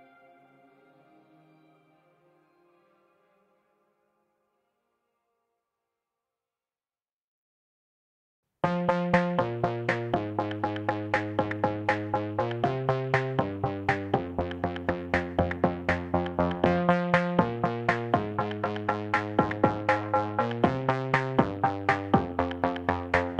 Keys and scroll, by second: 17.8 Delete, 20.0 g.